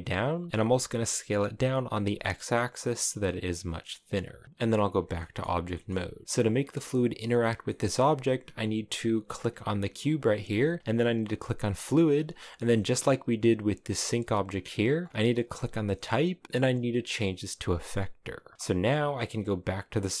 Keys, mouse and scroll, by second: 0.5 s, 4.4 s, 4.6 Tab, 5.0-7.2 middle drag, 7.2 scroll down 1, 7.3-9.2 middle drag, 9.2 g, 11.5 click, 12.2 shift+middle click, 12.6 right click, 13.8 right click, 17.6-20.2 drag.